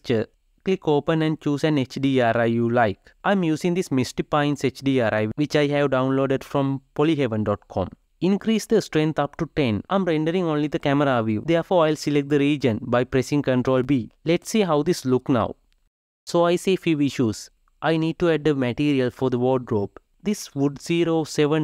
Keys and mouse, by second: 0.0-5.8 drag, 8.8-11.6 drag, 11.6 ctrl+b, 17.3-21.1 shift+middle drag, 21.1-21.6 drag.